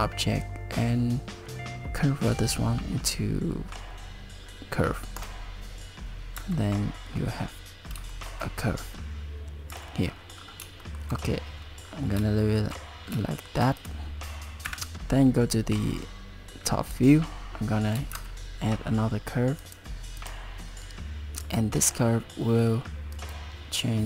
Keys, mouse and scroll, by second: 6.4 Tab, 7.1-8.0 scroll up 3, 8.1 shift+middle click, 9.7 Tab, 10.1-10.5 scroll down 6, 10.8 shift+middle click, 11.9 scroll down 2, 12.4 shift+middle click, 13.3 shift+middle click, 13.8 click, 14.7 KP_7, 18.1 shift+a, 21.4 Tab, 23.2 right click.